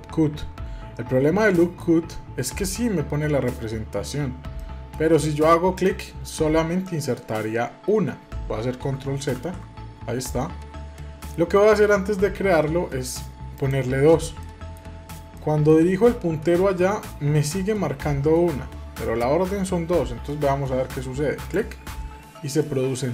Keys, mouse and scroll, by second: 1.4-3.7 middle drag, 4.6-5.8 middle drag, 5.8 click, 6.8-9.3 middle drag, 9.3 ctrl+z, 11.0-13.6 middle drag, 13.6 click, 14.4-18.4 middle drag, 21.5 click, 22.6-23.1 middle drag.